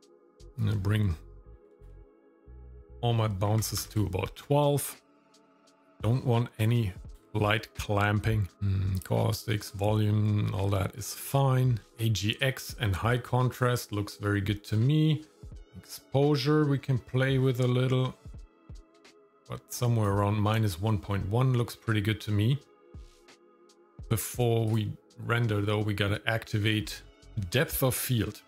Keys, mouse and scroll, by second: 2.8-3.8 drag, 5.1-5.7 scroll down 3, 5.8-7.2 drag, 8.5 scroll down 3, 10.6-11.4 scroll down 2, 11.4-11.9 scroll down 3, 15.3-20.0 drag, 23.1-24.1 scroll up 8, 24.7 click, 26.8-27.8 scroll down 3.